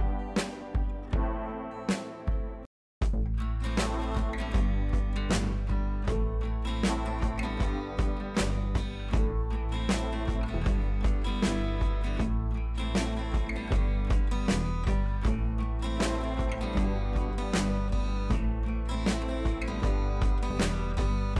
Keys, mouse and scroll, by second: 1.1 ctrl+c, 1.7 click, 2.1 ctrl+v, 2.7 click, 4.4 click, 7.9 click, 8.9-9.3 shift+click, 9.7-10.1 click, 10.8 click, 11.7-12.0 click, 12.7-13.2 shift+drag, 13.8-14.3 click, 15.3 Down, 16.1 click, 18.3 ctrl+[, 19.1 click, 20.3 shift+click.